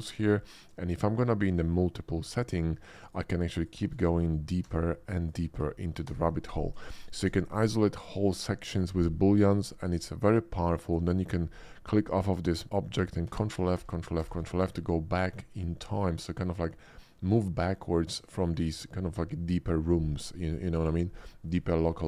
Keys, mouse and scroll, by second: 3.1 click, 3.6 shift+click, 4.6 ctrl+f, 5.1 click, 6.0 ctrl+f, 6.9 shift+middle drag, 10.8 click, 13.3 ctrl+f, 13.8 ctrl+f, 14.2 ctrl+f, 14.6 middle click, 21.6 shift+middle click.